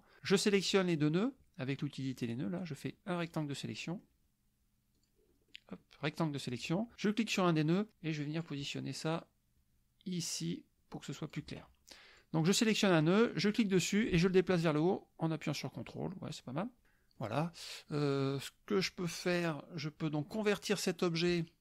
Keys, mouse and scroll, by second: 2.1 click, 2.6-3.5 drag, 3.7 click, 3.8 scroll down 2, 4.0 scroll up 2, 5.0 click, 5.5 click, 6.1 click, 7.4-8.6 drag, 10.4-11.5 drag, 11.9 click, 13.3-17.4 drag, 17.6-18.3 drag, 21.3 click.